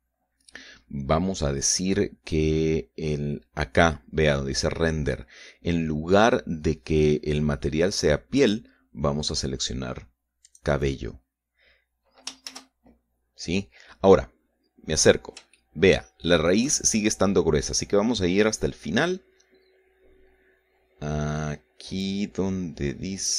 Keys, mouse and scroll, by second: 1.5-3.1 scroll down 4, 3.1-7.4 scroll up 2, 9.4 click, 11.5 click, 13.5 shift+z, 15.5-16.2 scroll up 2, 16.6-17.7 shift+middle drag, 19.3-20.3 scroll down 3, 20.5 scroll down 1, 23.1 click.